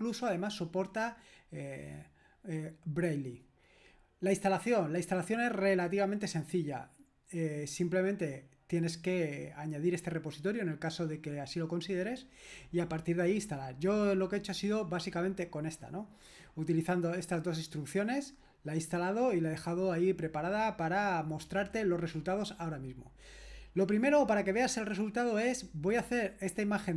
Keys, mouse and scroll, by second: 1.0-2.3 scroll up 2, 2.3 scroll up 1, 2.5-3.1 scroll down 2, 3.1-4.0 scroll down 1, 4.0-5.0 scroll down 1, 5.0-5.8 scroll down 1, 5.8-15.1 scroll down 1, 15.1 click, 18.3-19.3 scroll down 1, 19.3-21.7 scroll down 1, 21.7-22.6 scroll down 1, 22.6-24.8 scroll down 1, 24.8 click.